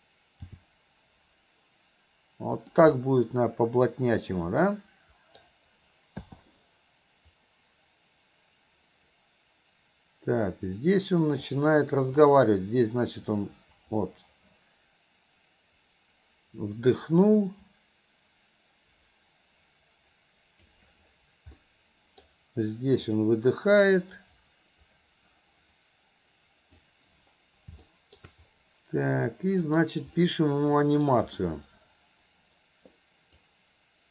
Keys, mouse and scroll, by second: 0.6 g, 3.0-5.4 middle drag, 3.0 scroll up 1, 6.4 i, 7.4-11.6 drag, 12.4-20.8 drag, 21.6-22.3 middle drag, 23.2-26.9 drag, 27.9-28.3 middle drag, 29.6 click, 30.2-31.1 middle drag, 33.4-34.1 drag.